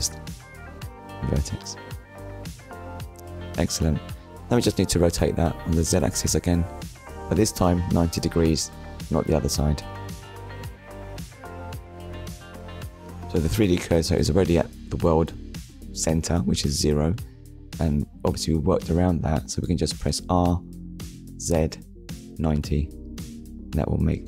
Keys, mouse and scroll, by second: 0.5 click, 1.7 click, 2.1 middle click, 3.6 click, 4.5 middle click, 5.1-5.4 scroll down 2, 5.4 shift+middle click, 7.0 middle click, 8.7 shift+middle click, 10.6 click, 11.4 click, 13.3 middle click, 14.5 r, 18.8 9, 20.1 Return, 20.8 middle click, 21.8 click, 22.1 middle click, 23.1 click.